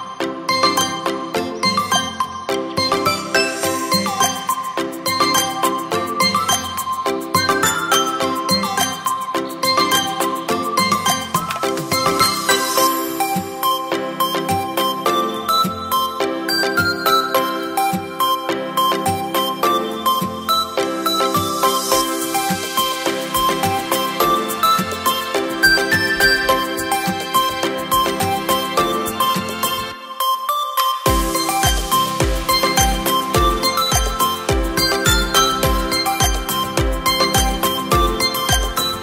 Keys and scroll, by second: 2.6 Down, 2.6 Down, 3.9 Return, 3.9 \, 5.4 space, 33.6 space.